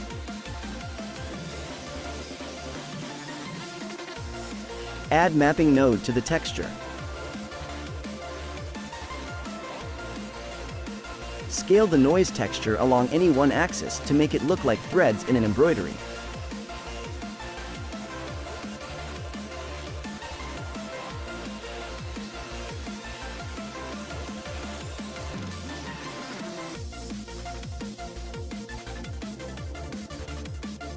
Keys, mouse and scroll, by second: 0.9 shift+d, 3.1 drag, 5.4-6.6 scroll up 2, 6.6 click, 8.4 middle click, 9.0-10.4 scroll up 4, 10.4-16.1 drag, 16.5-18.9 drag, 18.9-22.0 middle drag, 22.7-24.4 drag, 24.6 shift+a.